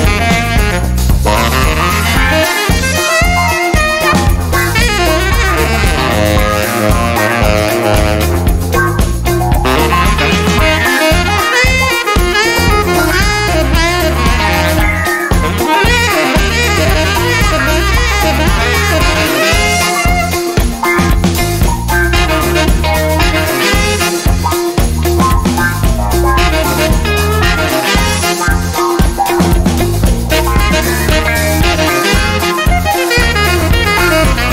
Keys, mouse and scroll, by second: 1.2 click, 6.3 click, 7.3 0, 7.8 click, 8.2 1, 8.8 click, 9.7 click, 11.2 click, 14.0 click, 14.6 click, 16.1 click, 17.1 click, 18.3 click, 19.1 click, 20.5 click, 21.4 click, 23.6 click, 24.4 click, 25.4 BackSpace, 26.2 click, 27.3 0, 29.4 click, 32.5 click, 33.4 0, 34.1 click, 34.4 1.